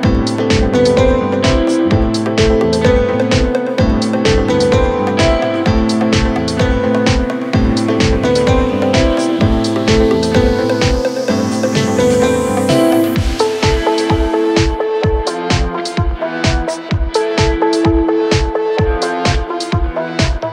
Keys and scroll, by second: 7.8 Escape, 8.7 Delete, 16.0 shift+F2, 16.4 Escape.